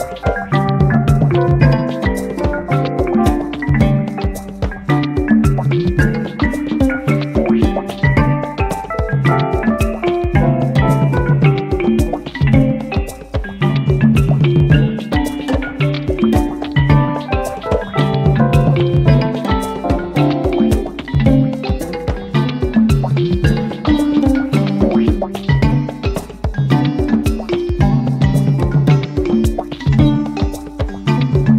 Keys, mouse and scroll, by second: 0.7 click, 2.4 click, 3.5 click, 5.7-6.9 drag, 7.8 click, 9.6 click, 11.3-12.9 drag, 13.8-16.2 drag, 16.8 F1, 21.6 ctrl+d, 23.2 ctrl+shift+click, 25.5 click, 28.6 ctrl+shift+click.